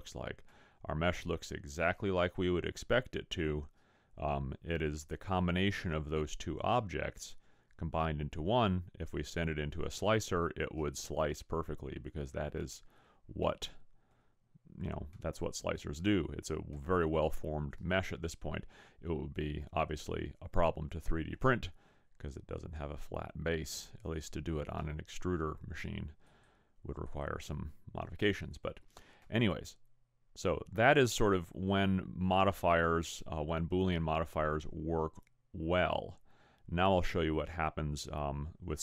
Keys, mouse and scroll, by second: 0.7 middle click, 12.1 middle click, 13.5-14.2 scroll up 1, 14.2 scroll down 4, 15.1 scroll up 1, 17.0 middle click, 26.3 click, 29.4 middle click.